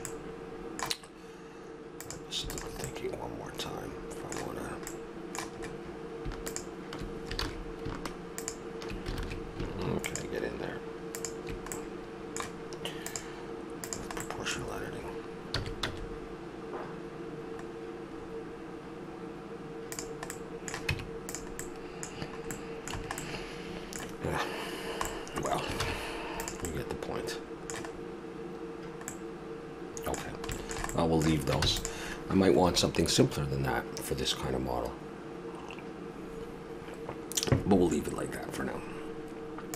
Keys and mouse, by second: 1.8 right click, 2.8 middle click, 3.4 middle click, 5.2-6.5 middle drag, 7.4 ctrl+z, 9.1 ctrl+z, 11.8 middle click, 14.2-15.5 middle drag, 15.5 s, 20.3-21.6 middle drag, 20.9 Tab, 22.1-23.3 middle drag, 22.9 a, 25.8 ctrl+s, 28.0 middle click, 31.6 ctrl+s.